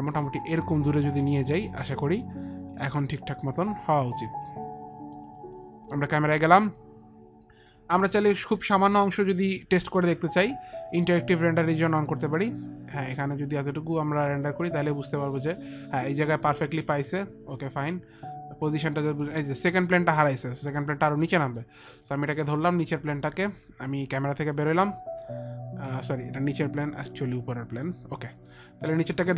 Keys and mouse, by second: 3.3 alt+click, 3.7 alt+click, 5.2 alt+click, 7.0 alt+click, 7.4 click, 9.4 click, 10.1 click, 11.2 click, 12.7 click, 14.2 click, 17.8 click, 21.0 click, 21.7 click, 22.6 middle click, 23.5 middle click, 27.3 click, 28.6 click, 29.1 click.